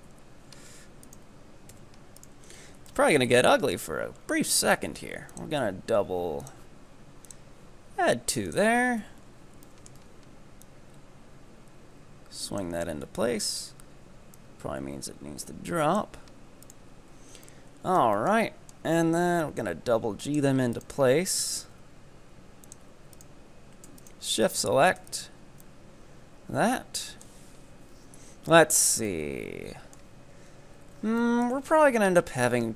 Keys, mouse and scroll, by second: 0.1 KP_3, 1.1 ctrl+right click, 1.7 f, 2.2 right click, 2.4-2.9 scroll down 5, 2.9 shift+middle click, 3.3 scroll up 2, 3.8 right click, 4.2-5.3 scroll up 1, 5.3-9.0 drag, 9.0 KP_7, 9.7 shift+middle click, 10.0 z, 10.6-13.1 drag, 13.1 KP_3, 13.6 scroll up 2, 14.4-16.7 drag, 16.7 right click, 17.0 scroll down 2, 17.2 z, 17.5-19.3 middle drag, 19.3 g, 20.8 right click, 21.6 g, 23.2-24.2 ctrl+right drag, 24.5 shift+right click, 25.1 f, 25.1 right click, 25.7-28.2 middle drag, 28.2 KP_3, 28.7-29.1 scroll down 3, 29.1 shift+middle click, 29.8-31.7 middle drag, 31.7-32.7 scroll up 3.